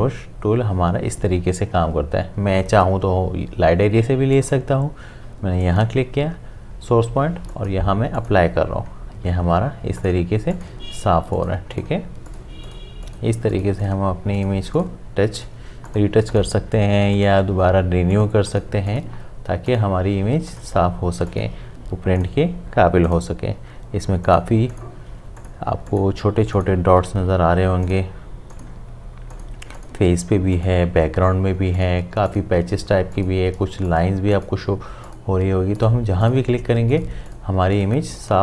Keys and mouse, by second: 4.3-38.4 drag.